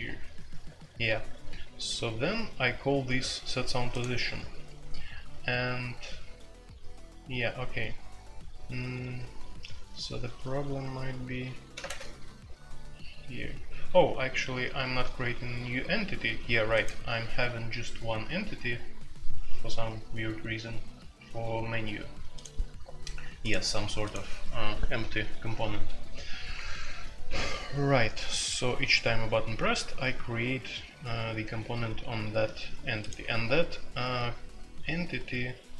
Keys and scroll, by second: 11.7 space, 11.9 Tab.